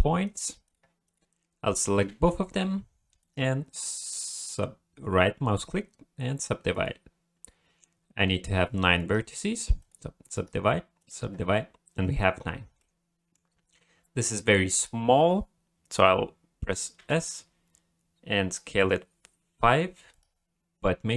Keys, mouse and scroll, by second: 0.2 click, 0.6 click, 1.0 click, 2.1 a, 3.2 right click, 9.0 right click, 10.3 right click, 12.5-13.3 scroll down 2, 12.8 middle click, 17.0 s.